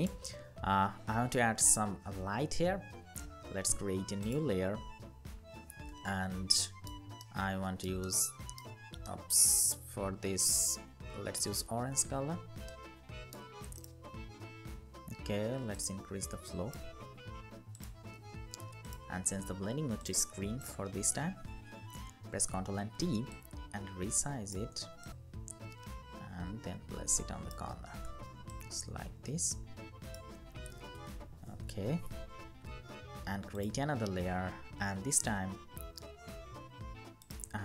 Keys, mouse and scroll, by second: 6.3 ctrl+alt+shift+right click, 12.4 alt+right click, 20.9 ctrl+t, 23.0 alt+shift+click, 28.2 alt+shift+click, 30.7 Return, 34.5-35.5 typing.